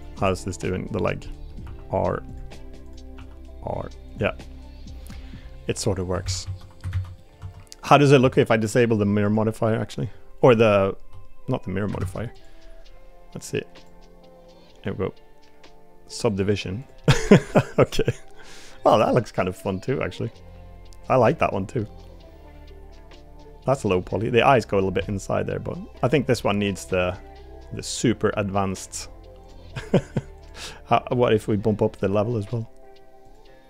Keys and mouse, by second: 0.2-0.6 middle drag, 1.0 click, 1.3 middle drag, 1.6 r, 3.1 r, 4.4-5.4 middle drag, 6.2 ctrl+z, 6.4 ctrl+z, 7.2 middle click, 7.4 Tab, 7.9 click, 8.2 Tab, 12.0 ctrl+Tab, 12.3 click, 13.7 click, 16.3 click, 17.1-18.8 middle drag, 19.1-21.4 middle drag, 21.8-24.0 middle drag, 28.8 click, 29.4 click, 29.7 middle drag, 30.4 click, 32.5 click, 33.2 click.